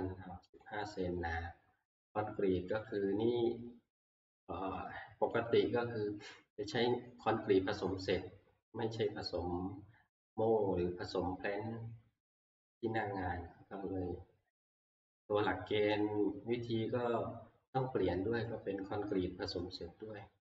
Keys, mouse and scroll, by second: 0.6 click, 2.9 click, 5.5 click.